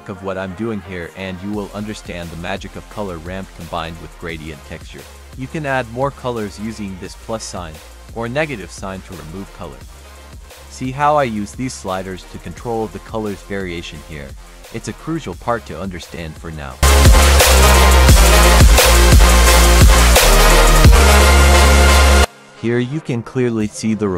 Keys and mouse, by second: 0.3 click, 1.4 click, 1.5-3.0 drag, 3.4 click, 5.4-7.0 drag, 7.9-9.1 drag, 9.3 click, 10.6-11.2 drag, 11.5-12.0 drag, 12.3-12.8 drag, 13.2-13.7 drag, 15.0 click, 15.7-16.8 drag, 18.0-18.5 middle drag, 20.5 click, 20.7 click, 20.9-23.4 drag, 23.8-24.1 drag.